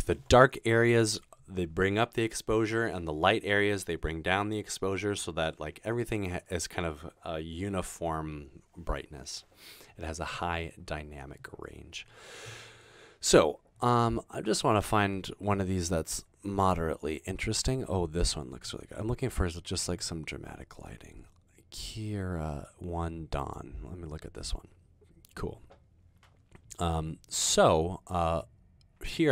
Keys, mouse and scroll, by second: 10.5-11.3 scroll down 2, 12.0-14.1 scroll down 6, 14.5-17.7 scroll down 3.